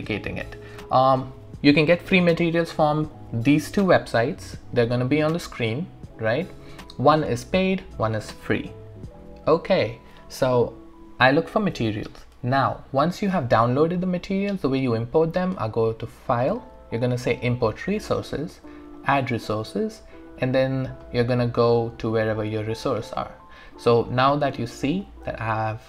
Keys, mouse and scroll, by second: 15.6 click, 23.0-24.0 scroll down 1, 25.2 click, 25.5 ctrl+click.